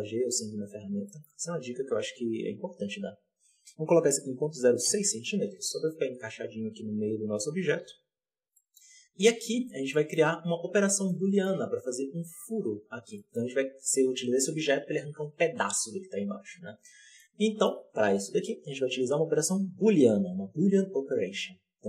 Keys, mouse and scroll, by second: 0.5-1.0 scroll up 3, 1.0 shift+middle drag, 1.1-2.1 scroll up 2, 2.1 n, 4.8-6.3 drag, 6.3-7.5 scroll down 3, 7.7 n, 8.4-9.1 middle drag, 9.1 z, 9.5-9.8 scroll up 1, 9.8 shift+middle drag, 10.1-10.7 scroll up 2, 10.7 scroll up 2, 11.0-12.0 shift+middle drag, 12.0-13.1 drag, 13.1-13.8 shift+middle drag, 13.8-16.6 drag, 16.6-17.1 scroll down 1, 17.1-21.3 shift+middle drag.